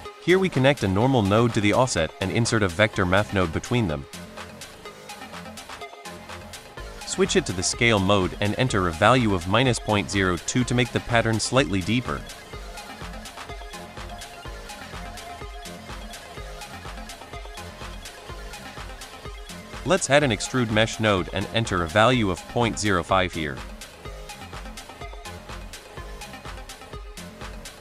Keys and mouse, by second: 0.0-0.3 drag, 3.9 middle drag, 4.2 shift+a, 6.8 click, 7.3-8.0 drag, 8.3 middle click, 8.7-11.0 drag, 12.2 shift+middle drag, 13.3 shift+middle drag, 14.1 shift+middle drag, 14.9 space, 15.4 space, 16.7 middle drag, 17.3 middle drag, 17.8-18.2 drag, 18.6-19.0 drag, 19.2 middle click, 19.7 shift+a, 21.2 click, 21.5-22.0 drag, 22.3 middle drag, 23.4 middle drag, 25.3 middle click, 26.6-27.8 drag.